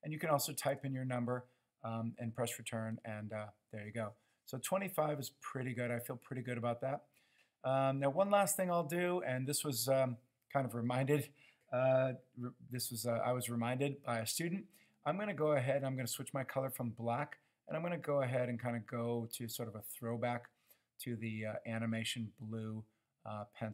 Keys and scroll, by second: 0.7 Return.